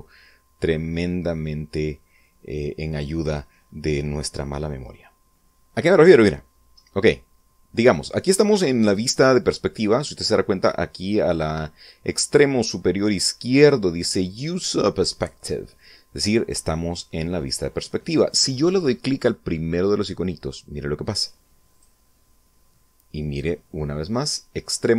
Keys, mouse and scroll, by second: 6.4-6.8 scroll up 2, 6.8 scroll down 2, 7.1-8.8 middle drag, 8.8-12.0 scroll up 1, 21.5 click.